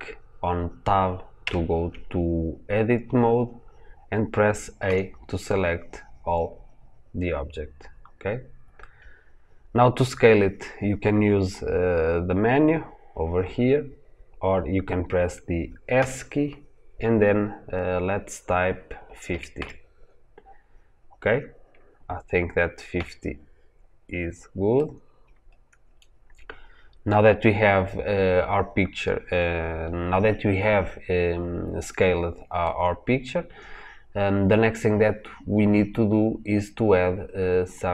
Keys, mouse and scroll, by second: 1.3 Tab, 3.1-3.4 scroll down 1, 3.4-4.7 scroll up 1, 4.7 a, 7.2-8.9 scroll down 2, 8.9-11.4 scroll up 2, 11.4-15.9 scroll up 1, 15.9 s, 22.9 KP_Enter, 23.6-24.6 scroll down 1, 24.6-32.6 middle drag, 32.6-37.9 scroll down 2.